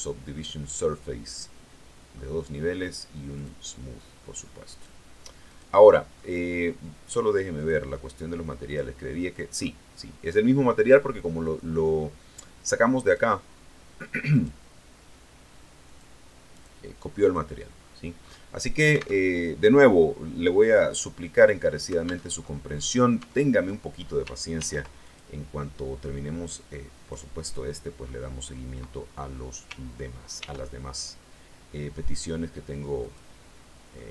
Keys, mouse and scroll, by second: 0.3-1.5 drag, 1.5 middle click, 3.3 click, 4.0-4.3 scroll down 1, 4.6 right click, 5.4 right click, 6.1 middle click, 7.5 click, 8.6 click, 9.5 middle click, 12.9 right click, 14.2 right click, 15.7 click, 17.1 click, 18.1-18.4 scroll up 1, 19.1 alt+Tab, 22.1 alt+Tab, 23.1 Tab, 24.5 ctrl+r, 24.9 ctrl+click, 26.9 click, 27.5 scroll down 2, 27.9 scroll up 2, 30.3 ctrl+r, 30.9 ctrl+click, 32.9 click, 33.4-33.9 scroll down 1, 33.9 middle click.